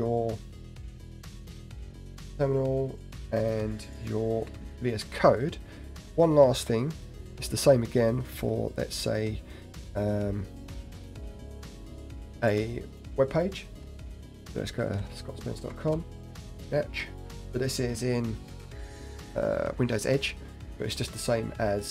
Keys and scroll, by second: 4.7 alt+Tab.